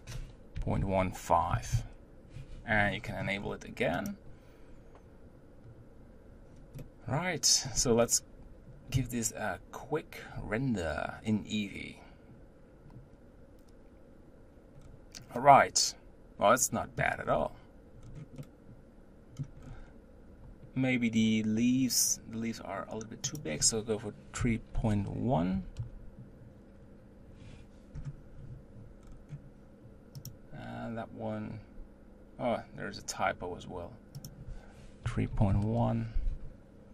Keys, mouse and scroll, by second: 2.8-4.7 scroll up 14, 4.8 click, 6.8-8.9 middle drag, 8.9 z, 14.9-15.4 scroll down 3, 15.4-17.3 middle drag, 17.3-18.1 scroll up 5, 18.1-18.5 scroll down 2, 18.5-19.7 middle drag, 19.7-20.7 scroll up 3, 20.7-21.8 scroll up 1, 23.3-28.2 drag, 29.1-31.4 scroll down 4, 32.7 click, 34.3-36.9 drag.